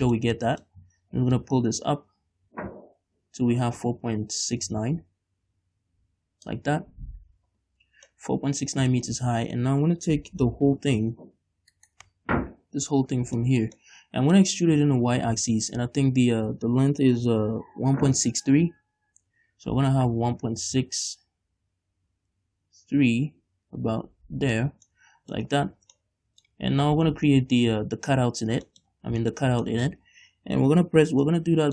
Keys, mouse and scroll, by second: 0.3-1.4 middle drag, 1.4-8.2 drag, 8.2-11.8 middle drag, 11.8 right click, 12.9 l, 13.5-15.1 shift+middle drag, 15.1 e, 24.6 shift+click, 24.8 scroll down 2, 25.0 middle click, 25.6 scroll up 2, 25.9 Tab, 26.1 middle click, 27.0 Tab, 27.1-27.8 scroll down 1, 28.8 shift+middle click, 29.0 shift+scroll down 1, 29.1-29.5 scroll up 2, 29.5 shift+middle click, 29.8 middle click, 31.6-31.7 middle drag.